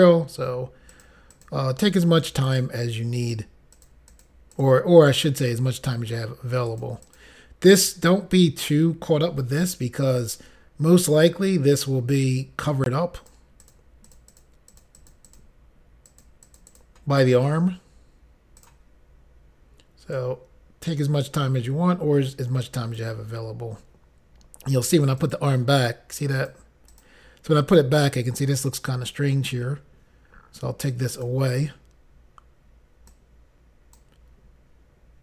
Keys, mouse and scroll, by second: 0.9 click, 1.5 click, 1.9 double click, 2.5 double click, 3.3 click, 3.8 click, 4.1 click, 4.6 click, 4.7 double click, 5.1 click, 6.7 click, 7.1 click, 10.2 ctrl+click, 13.2 click, 13.6 click, 13.7 double click, 14.1 double click, 14.3 double click, 14.4 double click, 14.7 double click, 15.0 double click, 15.1 double click, 15.3 double click, 16.1 double click, 16.5 click, 18.6 click, 25.3 click, 26.4 click, 27.0 click, 31.2 click, 33.1 click.